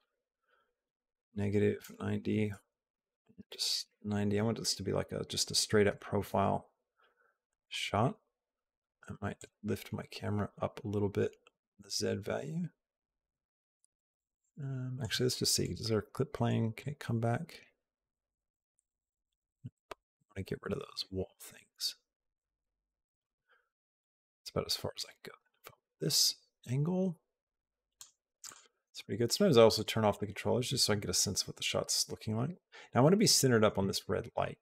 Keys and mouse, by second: 2.7-5.5 drag, 9.1-14.9 shift+drag, 16.7-23.1 drag, 23.8 click, 24.7-27.7 shift+drag, 28.2 click, 29.5 click.